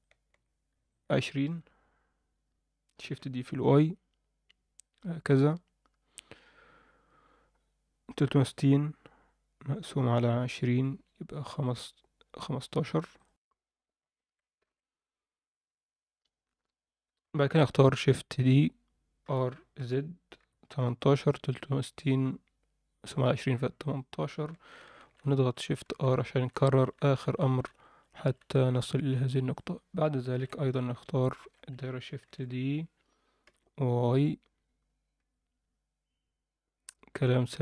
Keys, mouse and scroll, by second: 0.0 shift+middle click, 0.9 alt+shift+middle click, 3.0 shift+d, 13.3 F10, 13.3 click, 14.6 ctrl+l, 18.4 shift+d, 24.7 shift+r, 24.9 shift+r, 25.0-28.8 shift+r, 29.5 click, 30.3 ctrl+l, 31.2 alt+shift+middle click, 32.2 shift+d.